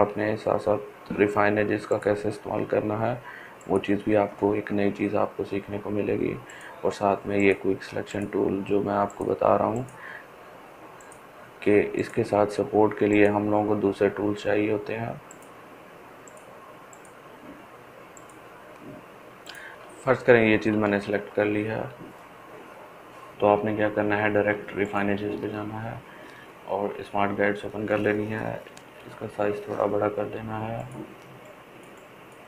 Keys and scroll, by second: 31.9 ], 32.2 ].